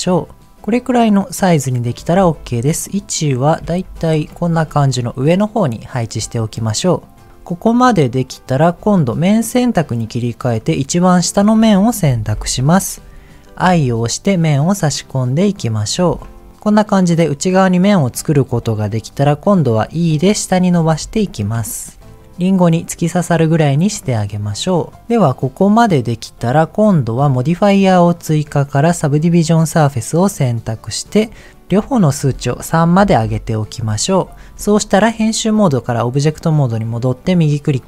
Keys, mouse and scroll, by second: 0.4-1.8 middle drag, 2.1 g, 2.2 z, 2.8 click, 3.1 middle click, 3.6 g, 3.7 z, 4.1 click, 4.3 shift+middle click, 4.7 middle click, 7.8 middle click, 9.4 click, 10.6 click, 11.5-12.7 scroll up 2, 12.7-13.1 scroll up 1, 13.1 middle click, 13.6 i, 15.8 click, 18.4-19.0 scroll down 2, 18.5 middle click, 19.8 e, 21.2 click, 21.6 shift+middle click, 22.0 middle click, 22.9-24.1 middle drag, 24.5 middle click, 31.5 scroll up 1, 31.9-33.2 drag, 35.3 Tab, 37.2-37.8 right drag.